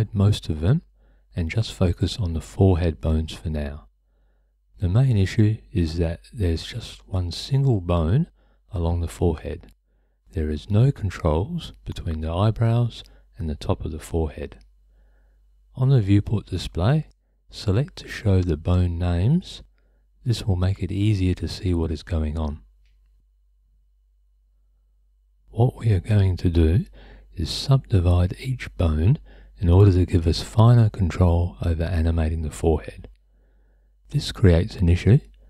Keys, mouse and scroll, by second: 0.0 h, 0.5 click, 0.7 h, 3.2 h, 4.3 h, 6.3 click, 6.5 h, 7.0 click, 7.3 h, 7.5 click, 8.0 h, 8.5 click, 8.6 h, 10.4 click, 11.1 h, 13.4 shift+click, 15.1 h, 25.4 shift+click, 26.3 shift+click, 27.3-29.2 right drag, 34.8 click.